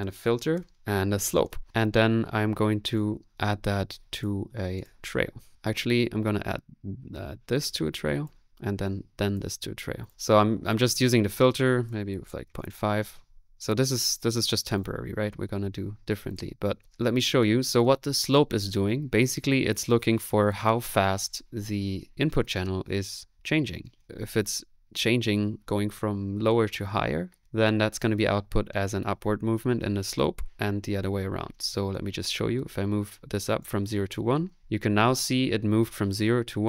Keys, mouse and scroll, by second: 0.0-1.8 typing, 0.8 right click, 1.7 click, 2.1-3.3 middle drag, 2.9 right click, 3.1-3.8 typing, 4.2 click, 4.8 click, 5.0 click, 5.5 click, 7.5-9.5 drag, 10.0-11.1 drag, 11.7-13.0 drag, 13.4 middle click, 14.0 right click, 14.8 click, 15.4 middle click, 16.3 click, 17.8 space, 34.1 click.